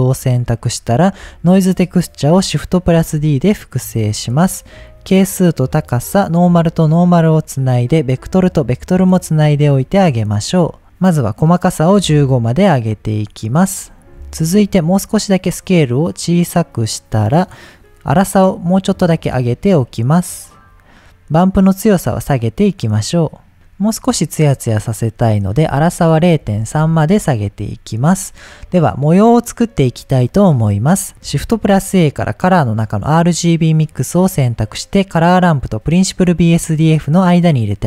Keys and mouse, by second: 0.2 middle click, 1.1 click, 2.9 shift+d, 4.2 click, 4.9-5.9 drag, 6.5-7.3 drag, 8.1-9.2 drag, 9.5-9.9 drag, 10.3 click, 11.5 click, 12.9 middle click, 14.1 ctrl+z, 15.0-17.2 drag, 18.2-20.7 drag, 21.5-23.5 drag, 23.5-24.5 middle drag, 25.4-27.5 drag, 28.3-28.6 middle drag, 31.5 shift+a.